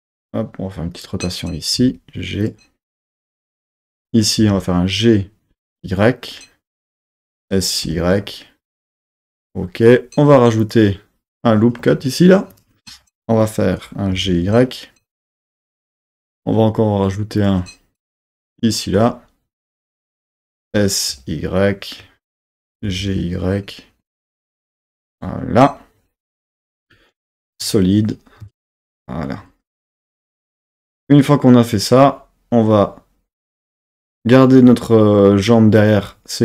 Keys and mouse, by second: 0.0 r, 0.9 click, 1.8 g, 2.5-3.5 drag, 4.4 g, 5.7 y, 7.1 click, 7.4 s, 7.9 y, 9.2 click, 10.6 click, 11.4 click, 12.5 click, 14.1 g, 14.4 y, 15.9-17.5 drag, 18.5 click, 19.8 click, 20.6 s, 21.1 y, 22.4 click, 22.8 g, 23.2 y, 25.0-27.2 drag, 27.2 z, 28.4 Tab.